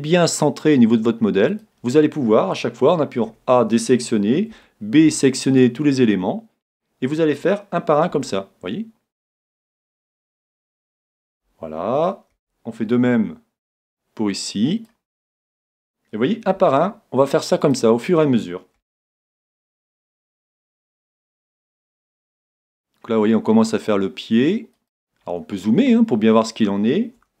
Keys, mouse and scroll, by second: 1.6-3.4 drag, 3.2 a, 4.6 b, 8.1 s, 11.3-13.0 drag, 12.3 a, 12.8 b, 16.6 s, 17.7-19.6 drag, 18.8 a, 19.4 b, 21.7 s, 24.9-26.6 drag, 25.3-27.4 middle drag, 27.2 a.